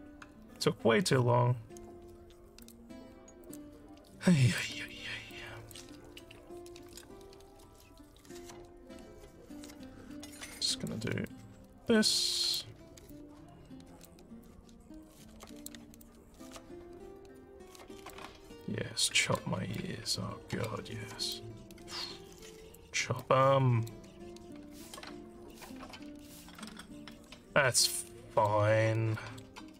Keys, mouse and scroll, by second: 1.2 alt+scroll up 3, 2.6 click, 3.5 click, 4.6 alt+click, 5.3 click, 8.6 alt+middle click, 8.9 alt+middle click, 10.2 click, 10.6 alt+click, 11.3-12.6 drag, 13.1 alt+click, 14.5-15.7 drag, 16.0-18.1 alt+drag, 18.6 click, 19.8 alt+click, 21.4-22.8 drag, 23.2 alt+click, 25.5 click, 26.6 alt+click, 27.3 alt+scroll down 2, 27.7 alt+middle click, 28.1 alt+click, 29.2 alt+middle click.